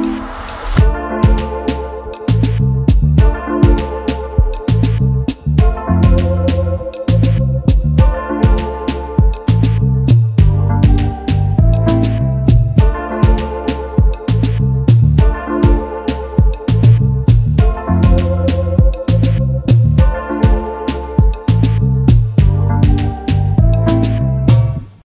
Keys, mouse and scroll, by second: 1.2 space, 3.0 shift+click, 5.4 shift+click, 6.8 space, 6.9 double click, 8.2-9.0 typing, 9.8 double click, 10.1 space, 10.5 space, 15.6 space, 15.7 double click, 16.1 space, 20.2 double click, 20.8 alt+scroll up 1, 21.2 space.